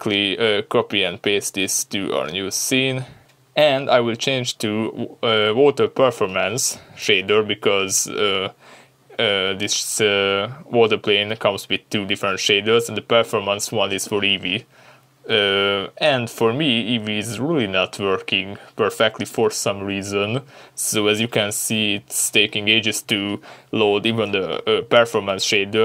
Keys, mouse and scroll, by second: 0.3 click, 0.6 ctrl+v, 1.4-2.7 scroll down 2, 2.7-6.9 middle drag, 4.1 scroll down 2, 6.9 click, 7.2 click, 8.5 click, 9.7 click, 10.8 click, 11.5 click, 14.5 click, 19.8-20.3 scroll up 2, 20.3 scroll down 2, 20.7-24.3 scroll up 1.